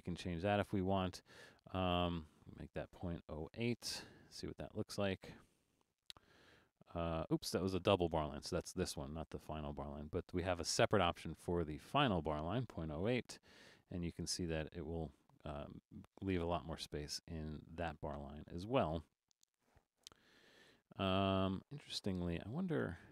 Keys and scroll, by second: 3.6 8, 13.0 8, 20.3 super+z, 20.7 super+z, 22.3 alt+super+a.